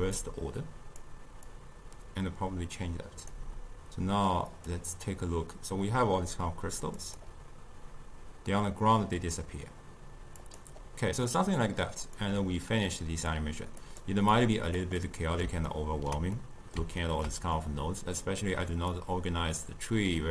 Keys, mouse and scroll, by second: 0.3-10.1 drag, 10.5 click, 11.4-12.3 middle drag, 12.3-14.0 drag, 14.4 click, 15.1-19.0 middle drag, 19.0 click.